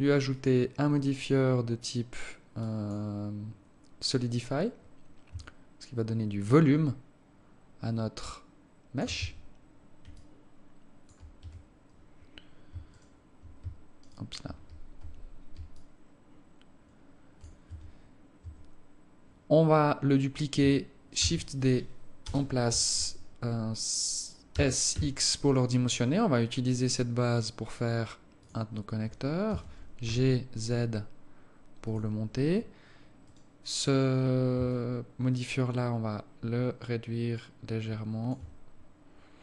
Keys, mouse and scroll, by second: 0.5 click, 1.3 click, 5.5 shift+click, 9.3 Tab, 10.3 alt+click, 11.5 Tab, 13.1 shift+right click, 14.2 shift+right click, 15.1 alt+scroll down 1, 15.9 alt+click, 17.9 Tab, 18.7 Tab, 19.9 scroll down 1, 21.3 shift+d, 24.7 s, 29.7 g, 33.4 right click, 34.9 shift+click, 38.9-39.3 scroll down 1, 39.3 scroll up 2.